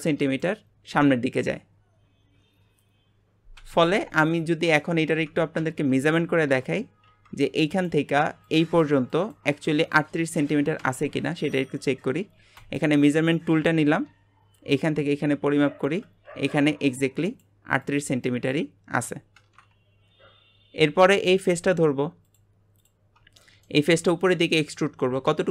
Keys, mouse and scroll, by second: 6.5 Tab, 12.6-19.6 drag, 20.9 Tab, 22.3 click, 23.1 scroll down 1, 23.4-25.5 shift+middle drag.